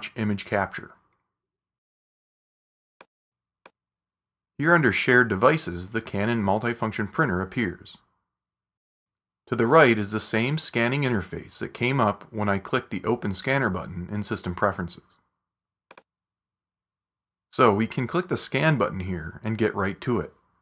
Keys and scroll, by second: 0.0-0.6 typing, 1.8 Return.